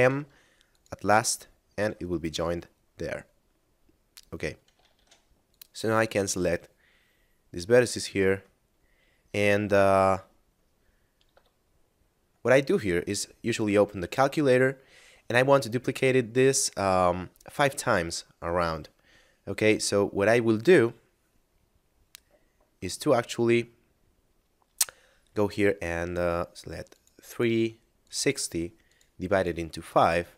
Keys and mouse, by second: 0.6 click, 1.8 a, 3.6 middle click, 4.8 ctrl+Tab, 5.5 click, 6.0 ctrl+click, 8.6 middle click, 12.8 click, 26.9 click.